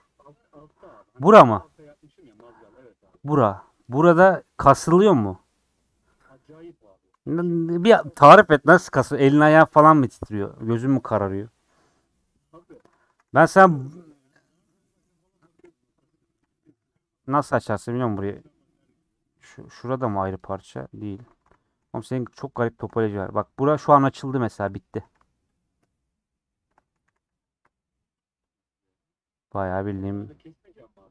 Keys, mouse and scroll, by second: 0.0-0.6 scroll up 6, 2.6 scroll up 1, 6.5-8.0 middle drag, 8.0 scroll down 1, 8.3-12.5 middle drag, 12.5 scroll down 4, 13.2 a, 14.0 middle click, 14.5 2, 15.6 KP_1, 15.9 scroll down 1, 16.2 scroll up 3, 18.6 scroll up 1, 19.4 3, 20.0 l, 20.8 middle click, 21.3 alt+z, 21.5 middle click, 21.8 alt+z, 21.9-23.4 alt+middle drag, 23.4 scroll down 1, 23.9 middle click, 24.8 scroll up 1, 25.0 2, 25.5 alt+Left, 26.6 alt+shift+Left, 27.0 a, 27.6 u, 28.4-31.1 drag.